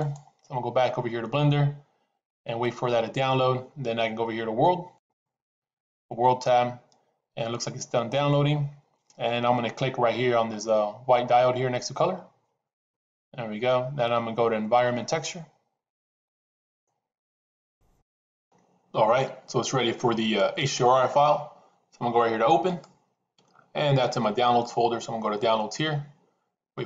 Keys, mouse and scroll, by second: 5.0 click, 12.6-16.3 drag.